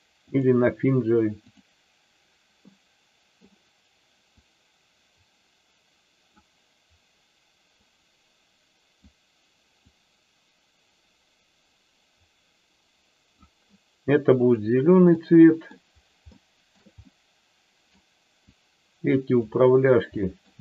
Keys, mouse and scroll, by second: 2.7 middle click, 4.3-6.3 drag, 7.7-9.1 drag, 9.8-13.5 drag, 14.5 click, 15.2 middle click, 16.3 shift+middle click, 17.0 middle click, 18.5 click, 20.1 middle click.